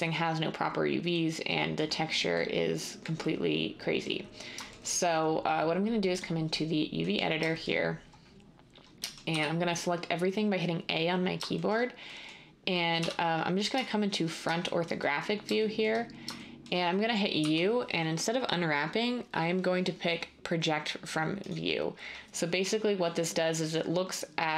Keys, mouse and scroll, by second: 9.3 a, 13.0 1, 17.4 u.